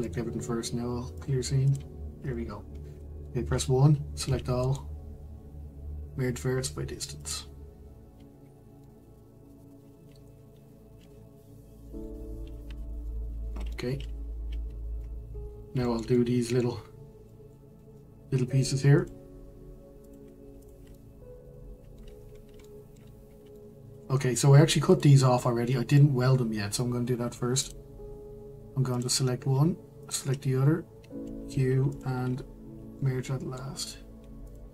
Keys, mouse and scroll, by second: 1.2 right click, 1.7 click, 3.0 middle click, 3.4 1, 4.2 a, 7.3-8.4 right drag, 8.4-8.8 scroll down 1, 8.8-11.9 middle drag, 13.1-15.4 shift+middle drag, 15.4-15.8 scroll up 2, 15.8-19.0 shift+middle drag, 19.0-20.1 drag, 20.6 shift+click, 20.9-22.2 middle drag, 22.2-22.6 scroll up 3, 22.6 shift+middle click, 23.1-23.5 scroll up 1, 23.5 shift+middle click, 24.2-24.9 scroll up 1, 24.9 click, 27.7-28.9 drag, 30.1 shift+click, 31.9 q, 32.9-34.5 middle drag, 34.5 click.